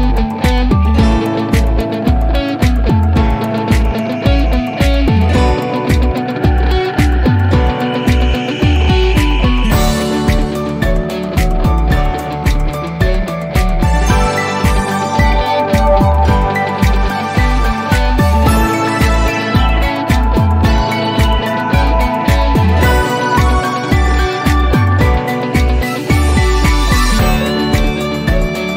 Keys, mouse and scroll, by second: 17.1-20.1 drag.